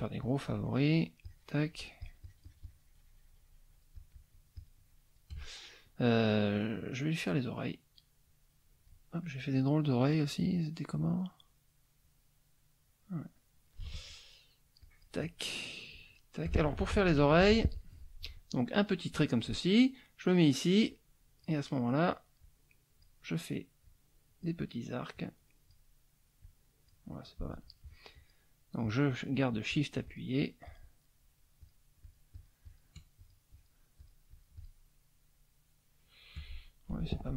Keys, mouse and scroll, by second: 7.1-9.0 drag, 9.2 click, 9.9 click, 10.5-12.0 drag, 12.6 click, 14.8 shift+click, 15.9 shift+click, 16.9 ctrl+shift+z, 20.9 click, 22.4 click, 23.8 click, 25.1 click, 26.4 click, 28.1 shift+click, 28.8 shift+click, 29.3 shift+click, 29.7 shift+click, 30.1 shift+click, 30.6 shift+click, 31.6 shift+click, 32.0 shift+click, 33.2 shift+click, 34.0 shift+click, 36.5 shift+middle click.